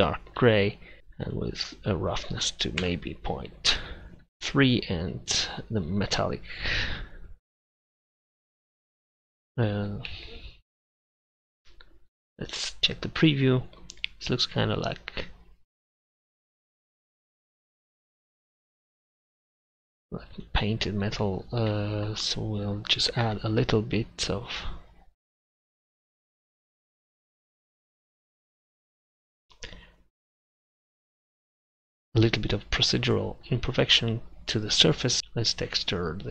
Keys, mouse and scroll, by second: 1.3-4.4 drag, 12.6-15.7 drag, 22.1-24.6 middle drag, 35.2 shift+a.